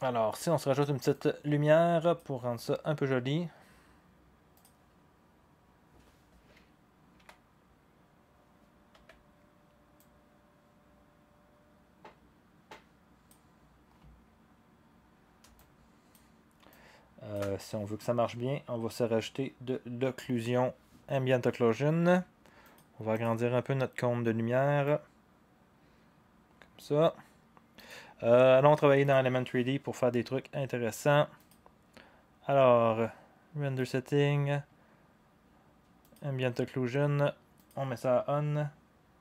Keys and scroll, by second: 7.3 t, 8.9 v.